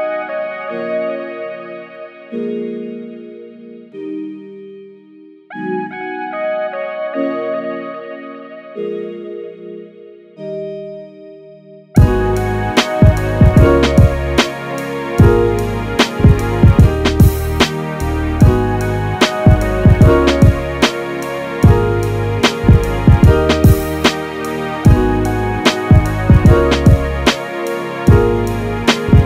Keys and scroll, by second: 19.0 f.